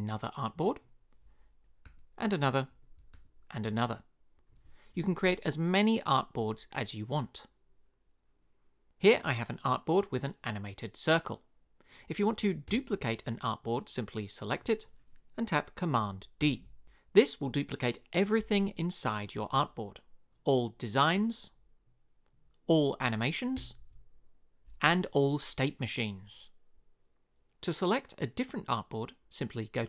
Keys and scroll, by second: 1.8 a, 12.7 space, 16.4 super+d, 23.6 space.